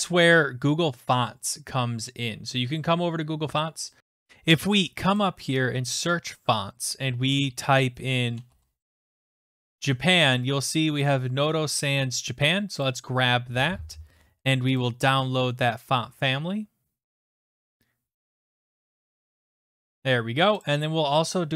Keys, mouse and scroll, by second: 1.3 scroll down 4, 3.3-4.0 scroll, 4.0 click, 4.0 scroll, 5.2 click, 8.0-9.3 typing, 12.9 click, 14.8 click, 20.7 click.